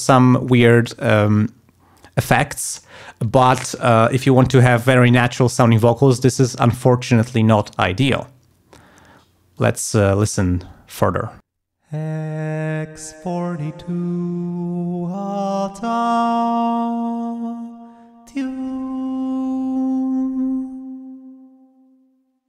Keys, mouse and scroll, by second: 9.5 click, 11.4 space, 21.8 ctrl+scroll down 2, 22.4 ctrl+scroll up 2.